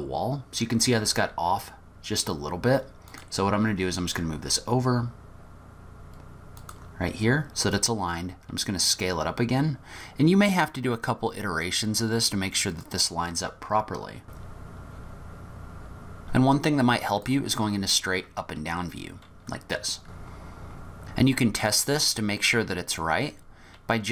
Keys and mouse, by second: 1.2 s, 3.0 click, 3.5 g, 8.4 s, 14.4-15.8 typing, 17.3 click, 21.1-22.2 middle drag.